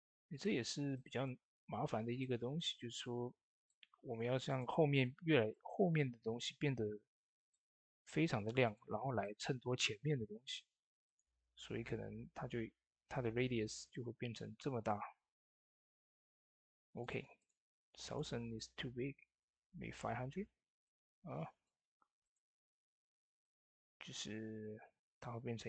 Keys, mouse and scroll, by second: 0.1 shift+d, 0.2 click, 0.9 shift+middle click, 2.8-8.5 drag, 7.5-9.0 drag, 9.1-10.9 shift+middle drag, 10.9-13.0 drag, 13.9 click, 13.9 scroll down 1, 14.7 click, 15.4 scroll down 1, 15.9 middle click, 16.6-20.5 drag, 20.7 click, 20.7-25.6 drag.